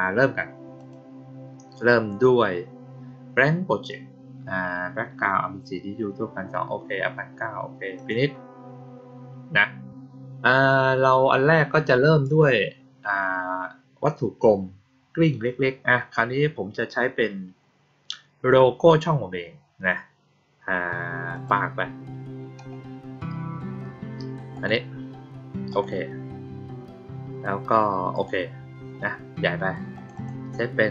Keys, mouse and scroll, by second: 0.7 click, 7.9 click, 21.3 click, 24.5 click, 25.6 click, 28.1 click, 29.9 click, 30.1 click.